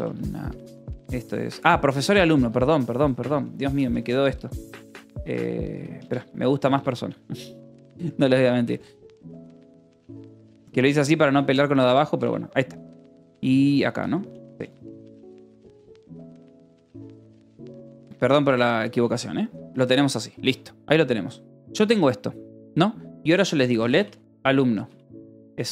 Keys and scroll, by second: 0.0-10.9 typing, 5.0 Escape, 11.3 Escape, 12.6 k, 14.5-18.2 typing, 15.0 Escape, 19.3 l, 19.8 l, 21.3 o, 22.4 Return, 23.3-25.7 typing.